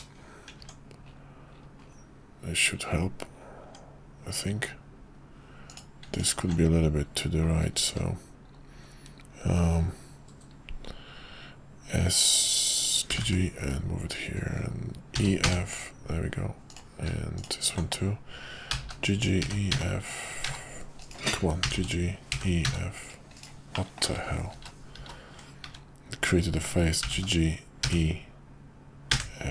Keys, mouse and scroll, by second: 0.6 Tab, 3.6 Tab, 5.7 click, 6.1 alt+click, 7.9 `, 13.1 g, 18.7 g, 21.7 f, 22.4 f, 22.4 e, 23.7 middle click, 24.1 ctrl+z, 25.6 `, 27.0 g.